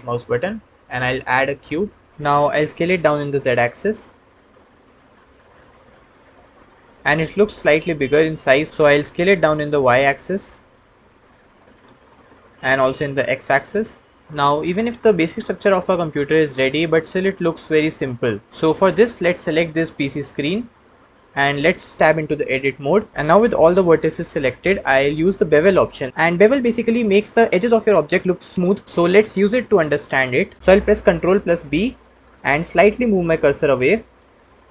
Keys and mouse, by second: 0.7 shift+a, 2.1 s, 2.1 z, 2.8 s, 3.0 z, 5.9-6.8 middle drag, 7.0-7.8 middle drag, 9.0 s, 9.7 y, 11.3 click, 11.9-12.5 middle drag, 12.8 s, 12.9 x, 14.0 click, 14.5-18.5 middle drag, 22.4 Tab, 31.5 ctrl+b.